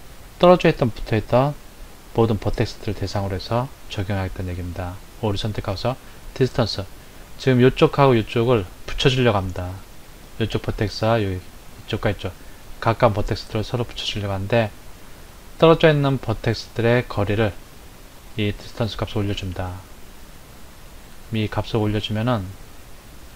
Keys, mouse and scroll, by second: 9.3-12.4 middle drag, 12.8-15.8 middle drag, 17.7-20.7 drag.